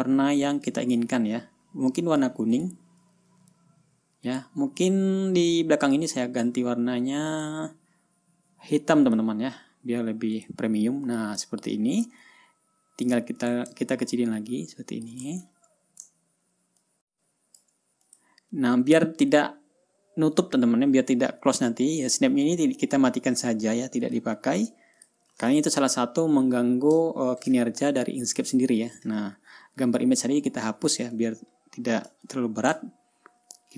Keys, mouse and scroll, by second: 1.2 click, 3.0 click, 4.8 click, 6.0 click, 7.8 click, 9.6 click, 10.9 click, 11.6 click, 11.9 ctrl+scroll down 2, 12.8-13.7 ctrl+drag, 14.6-15.7 ctrl+shift+drag, 15.9 ctrl+shift+scroll up 3, 16.6 ctrl+scroll down 2, 17.4-18.3 ctrl+drag, 18.6 click, 24.6 click, 25.1 click, 25.5 click, 28.7 Delete, 31.8 ctrl+scroll down 2, 32.1 ctrl+scroll up 2, 32.8-33.4 ctrl+drag.